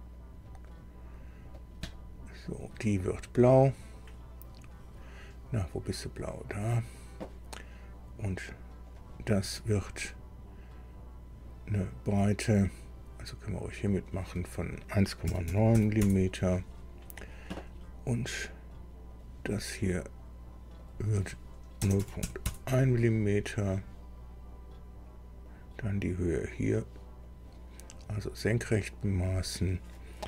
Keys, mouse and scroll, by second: 0.2 click, 0.7 right click, 1.2 scroll up 1, 1.8 right click, 2.5 click, 6.5 click, 8.9 click, 13.8 click, 15.2 KP_1, 15.4 KP_Decimal, 15.7 KP_9, 16.0 KP_Enter, 17.7-18.0 scroll up 2, 19.1 click, 20.8 click, 21.2 middle click, 21.8 KP_0, 22.0-23.0 middle drag, 22.0 KP_Decimal, 22.2 KP_1, 22.4 KP_Enter, 25.4 click, 27.2 click, 29.2 click.